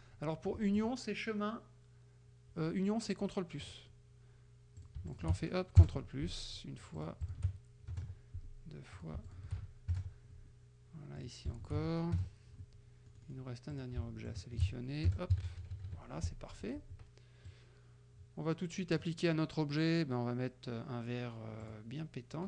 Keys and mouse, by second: 0.9 click, 3.7 click, 4.8 shift+click, 5.2 ctrl+shift+click, 5.8 ctrl+shift+KP_Add, 7.0 shift+click, 8.0 ctrl+shift+KP_Add, 9.0 shift+click, 9.4 shift+click, 10.0 ctrl+shift+KP_Add, 11.2 click, 11.7 shift+click, 12.2 ctrl+shift+KP_Add, 13.2 click, 13.8 click, 14.3 shift+click, 15.1 ctrl+shift+KP_Add, 15.4 ctrl+KP_Subtract, 16.6 F1, 17.6-19.3 drag, 21.7 click.